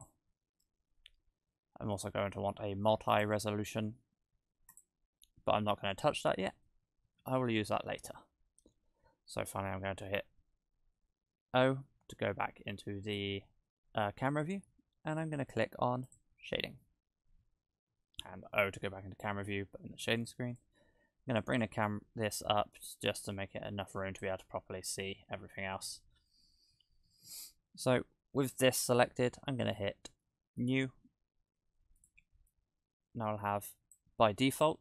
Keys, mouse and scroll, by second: 0.6 Tab, 2.0 click, 3.1 click, 9.9 KP_0, 10.8-11.7 scroll up 2, 11.7-12.8 scroll up 1, 12.8-15.0 scroll up 1, 16.2 click, 16.7 scroll up 1, 16.9-17.8 scroll down 3, 18.2 KP_0, 20.6 click, 27.6-30.6 scroll down 4, 30.6 click, 31.1 click, 32.0 click, 32.7 click, 34.5-34.8 scroll up 3.